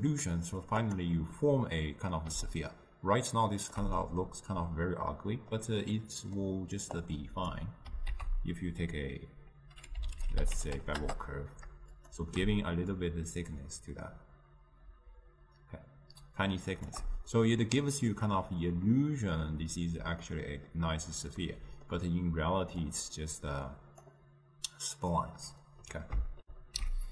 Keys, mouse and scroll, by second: 1.5-11.1 middle drag, 11.1 ctrl+a, 13.2-17.4 shift+drag, 17.4-23.0 middle drag, 23.0-26.5 drag.